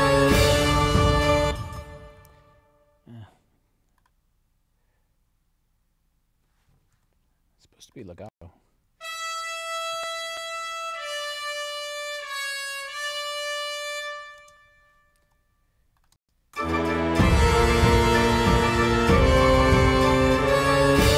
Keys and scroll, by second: 1.4 space, 8.3 space, 14.4 space, 16.2 space.